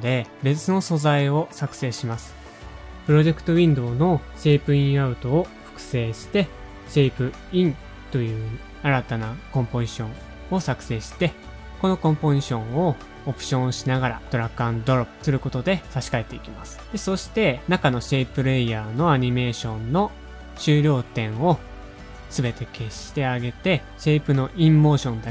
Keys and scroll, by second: 1.1 super+z, 1.1 space, 3.7 super+d, 3.9 space, 4.3 Right, 4.5 shift+Left, 4.6 shift+Left, 4.8 shift+Left, 6.2-6.7 typing, 10.6 shift+Left, 10.6 BackSpace, 12.5 super+z, 12.5 -, 18.6 super+a, 18.8 space, 19.5 u.